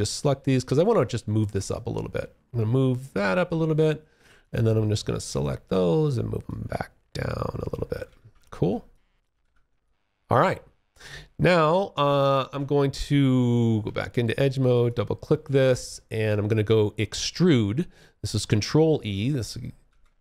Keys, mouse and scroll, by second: 0.0 g, 0.9 click, 3.6 click, 5.6 click, 7.2 space, 7.4 1, 8.1 alt+click, 8.6 alt+w, 9.0 alt+click, 9.5 alt+middle click, 10.3 alt+click, 11.6 Escape, 13.9 click, 14.0 double click, 14.7 alt+click, 19.0 ctrl+e.